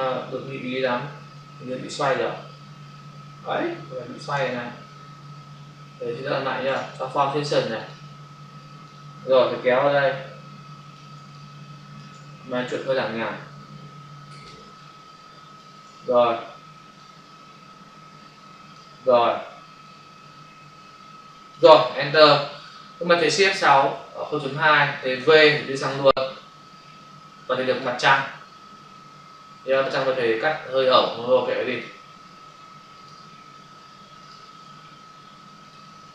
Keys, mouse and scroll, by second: 4.3 ctrl+alt+z, 5.8 Escape, 6.6 right click, 7.8 click, 8.9 click, 11.1 space, 11.2 click, 11.4 space, 12.9 click, 14.6 space, 14.7 click, 14.9 space, 16.9 click, 19.9 click, 22.1 Return, 24.5 Return, 25.2 v, 25.7 click, 29.7 click, 31.7 click, 32.9 click, 35.5 click.